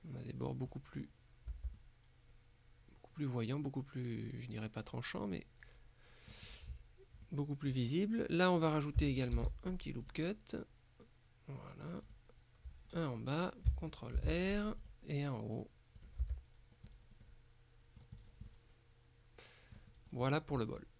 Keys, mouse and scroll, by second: 1.0-1.6 scroll up 1, 1.6 Tab, 1.8-6.6 drag, 6.6-7.1 scroll up 1, 7.3 click, 9.4 ctrl+r, 10.1 click, 12.1 click, 13.0-13.6 scroll up 1, 14.2 ctrl+r, 14.9 click, 16.0 click, 16.3 Tab, 16.6-17.3 scroll down 1, 17.3 middle click, 18.3 scroll down 1, 18.6 middle click, 20.0-20.4 scroll down 1, 20.4 middle click.